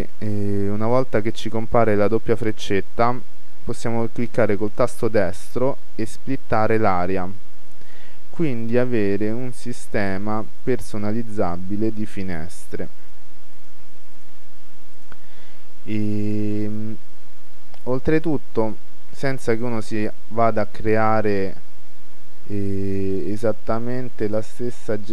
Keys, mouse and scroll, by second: 4.8-6.7 right drag, 10.0-11.7 right drag, 13.6-17.2 right drag, 17.2-20.7 middle drag, 20.7-22.5 drag, 24.6-25.1 drag.